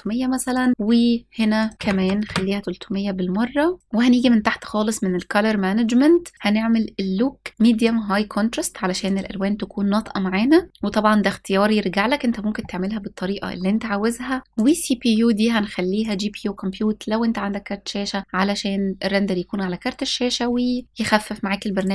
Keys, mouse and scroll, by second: 0.1 click, 1.2 click, 1.7 KP_0, 3.8 click, 3.8 scroll down 4, 6.0-7.5 drag, 6.0-6.9 scroll down 3, 8.7 click, 9.9-10.5 scroll up 2, 12.7-14.4 scroll up 2, 14.4-16.4 drag, 21.4 click.